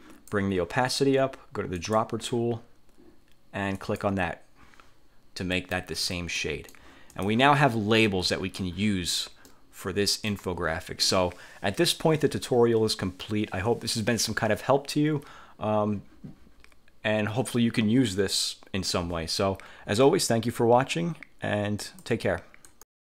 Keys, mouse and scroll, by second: 1.8 click, 3.8 click, 5.7 click, 6.5 click, 7.2 click, 9.6-10.6 drag, 22.0 click, 22.8 click.